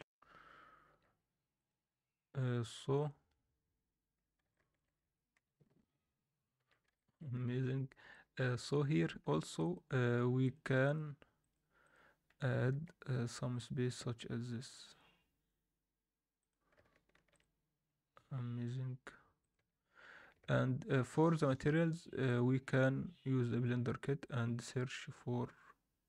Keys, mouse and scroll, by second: 1.5 click, 1.9-3.0 scroll down 2, 3.0 click, 4.2 scroll up 1, 4.4 alt+shift+middle click, 4.9 scroll up 1, 5.0 Tab, 5.3 z, 5.7 scroll up 1, 6.5 z, 6.9 alt+shift+middle drag, 7.3 scroll up 1, 7.4 Tab, 8.1 alt+middle click, 8.8-9.2 scroll up 1, 9.2 2, 9.4-12.1 drag, 12.1 scroll down 1, 12.2 scroll up 2, 12.7 s, 17.1 ctrl+r, 19.5 Tab, 19.6 scroll down 2, 20.4 alt+a, 21.0-26.0 drag.